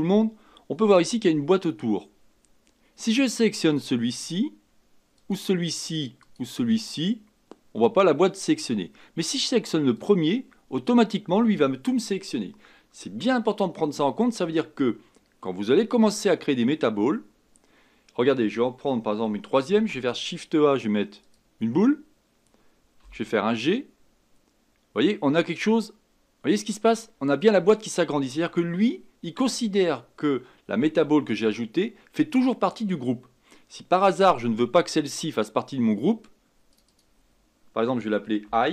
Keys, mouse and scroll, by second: 3.6 click, 5.1 click, 6.2 click, 9.9 click, 36.7-38.7 drag.